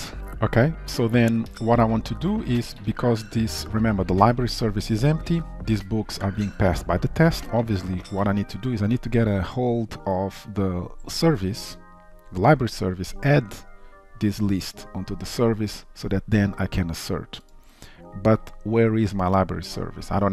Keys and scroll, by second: 2.2 ctrl+s.